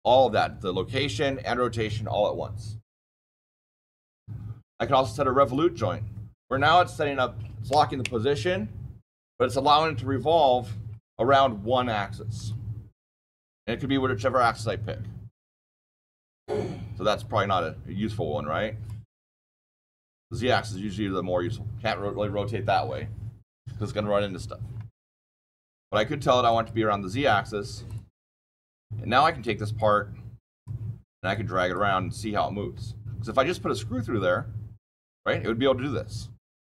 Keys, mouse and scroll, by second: 3.9 click, 5.3 click, 12.3 click, 13.0 click, 17.0 click, 18.8 click, 19.9 click, 20.5 click, 25.4 click, 26.4 click, 27.8 click, 29.3 click, 30.5 click, 31.7 click, 35.0 click.